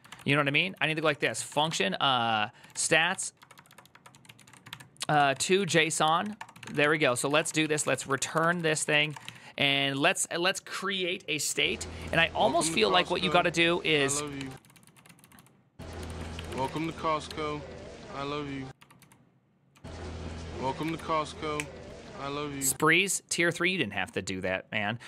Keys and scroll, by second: 0.0-9.5 typing, 11.7-17.5 typing, 13.9 ctrl+c, 18.5-19.5 typing.